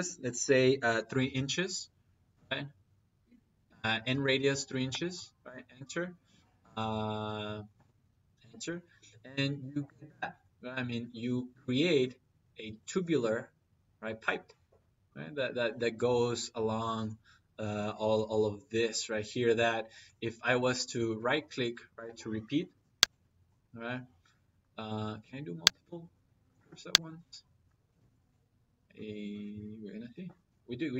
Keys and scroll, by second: 0.6 3, 1.1 shift+', 2.2 Return, 4.7 Return, 7.6 Return, 24.7 Escape.